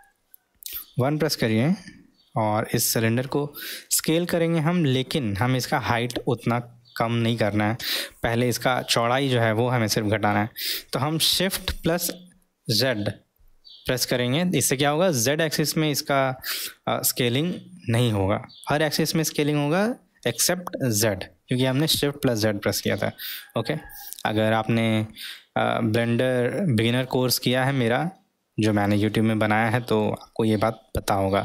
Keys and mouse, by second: 3.9 s, 29.4-30.1 middle drag.